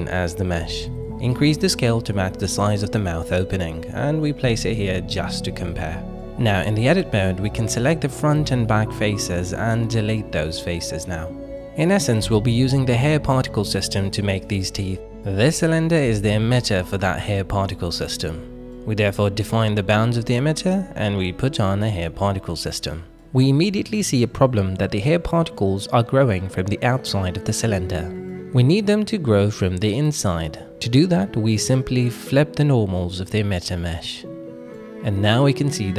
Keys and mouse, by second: 0.7 s, 1.5 click, 1.9 g, 5.6 Tab, 6.2 middle click, 6.9 shift+middle click, 7.3 Tab, 8.2 click, 8.5 middle click, 9.5 middle click, 10.5 x, 11.5 shift+middle click, 11.9 middle click, 13.2 s, 13.8 click, 14.5 a, 14.9 o, 14.9 s, 15.3 y, 17.7 click, 18.1 middle click, 19.2 click, 21.0 click, 22.1 click, 24.9 middle click, 26.1 KP_1, 26.9 shift+middle drag, 28.2 middle drag, 28.7 middle click, 30.0 Tab, 32.1 alt+n, 34.1 Tab, 35.0-35.4 middle drag, 35.8 middle click.